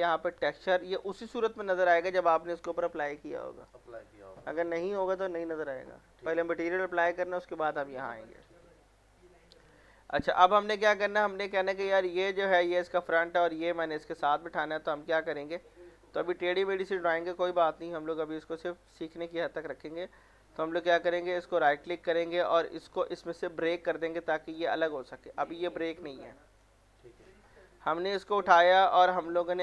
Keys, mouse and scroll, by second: 0.3 click, 1.6 scroll down 1, 8.0-9.1 scroll down 1, 9.2-10.7 drag, 10.7-12.1 alt+middle drag, 12.1 click, 12.6 scroll up 1, 14.6-15.7 scroll down 1, 15.7 middle click, 16.1 scroll up 1, 16.3-17.2 scroll down 1, 17.2 middle click, 17.6 scroll up 1, 21.5 right click, 23.5-26.4 drag, 26.4 ctrl+z, 28.2 click, 29.4 middle click.